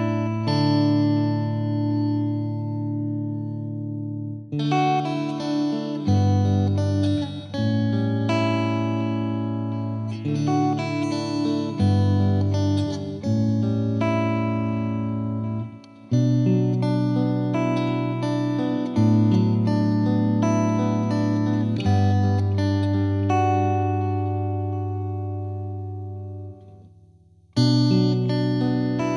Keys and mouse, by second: 1.0 click, 3.3 click, 4.0 click, 5.4 click, 5.8 shift+click, 6.5 shift+click, 7.6 shift+click, 7.9 shift+click, 8.8 shift+click, 10.0 shift+click, 11.3 shift+click, 12.0 shift+click, 12.4 shift+click, 13.9 shift+click, 14.4 shift+click, 16.7 click, 18.9 click, 19.3 click, 20.3 click, 22.8 click, 25.1 click, 27.1 click, 28.8 click.